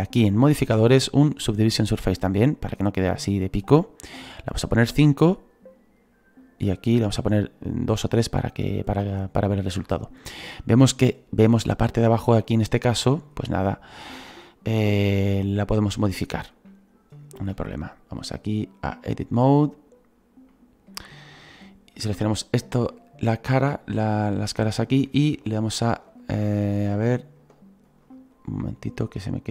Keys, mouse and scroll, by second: 8.7-12.4 scroll down 2, 13.1-14.8 scroll up 9, 14.8 /, 19.1-22.2 drag, 25.6-29.5 alt+right drag.